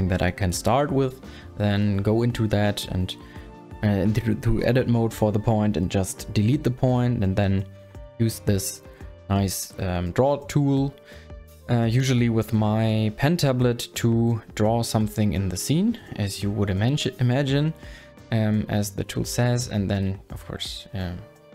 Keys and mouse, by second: 2.1 Tab, 3.3 a, 16.1 click, 18.0 ctrl+z, 18.5 click, 19.7 ctrl+z, 19.9 click, 20.6 click, 21.0 click, 21.3 click.